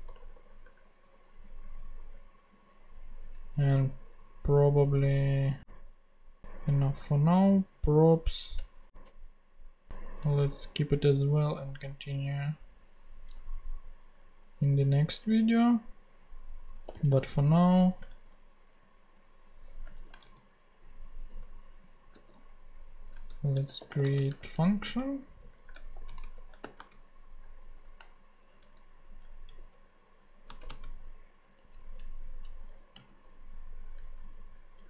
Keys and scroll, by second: 8.2 Left, 8.5 Return, 9.1 Up, 11.6 Return, 16.6-17.6 typing, 18.0 Return, 19.9 alt+shift+Left, 20.2 alt+shift+super+c, 21.1 shift+super+c, 21.2 super+Return, 21.7 Up, 22.1 super+v, 23.3 super+Left, 23.4-27.6 typing, 28.6 alt+shift+[, 28.7 alt+shift+Left, 30.5 space, 30.6 =, 30.7 space, 31.4 Down, 32.9 ,, 33.2 ], 34.0 BackSpace.